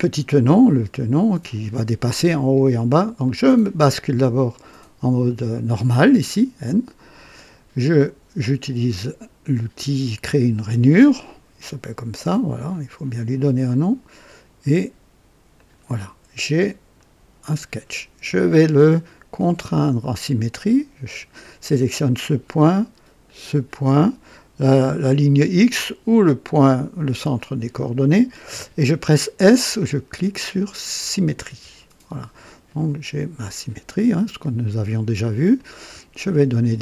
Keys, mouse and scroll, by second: 3.2 click, 10.2 click, 12.7 click, 15.5 click, 16.9 right click, 19.5 click, 23.2 click, 27.3 click, 31.4 s, 33.3-35.0 drag, 35.5 click.